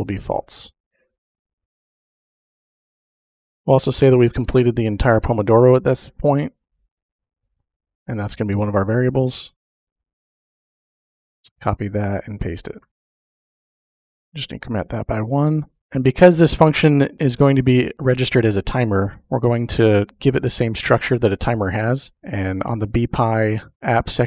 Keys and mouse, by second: 0.6 ctrl+v, 1.7-3.4 typing, 3.5 Return, 4.2 Tab, 5.0 Tab, 5.1 typing, 8.7 click, 11.5 click, 11.9 ctrl+v, 12.9 F15, 13.0 space, 13.3 shift+=, 13.9 space, 14.2 1.